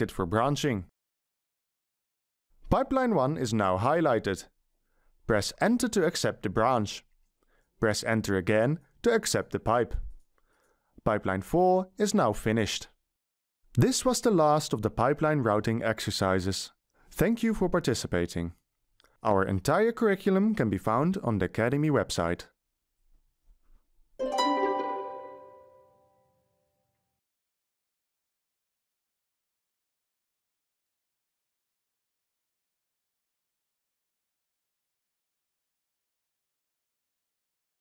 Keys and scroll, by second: 1.5 t, 7.0 Return, 10.0 Return.